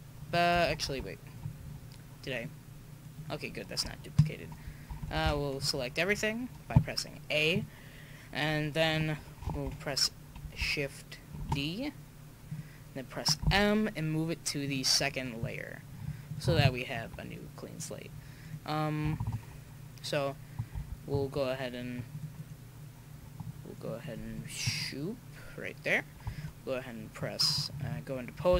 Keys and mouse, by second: 0.7 ctrl+z, 2.4-5.2 right drag, 5.0 a, 5.2 a, 5.5 right click, 5.8 right click, 11.4 shift+d, 13.5 m, 16.2-18.4 drag, 17.7-20.3 right drag, 20.8 a, 22.1-24.0 drag, 22.3-24.3 right drag, 26.4-28.5 drag, 26.4 right click, 28.5 a.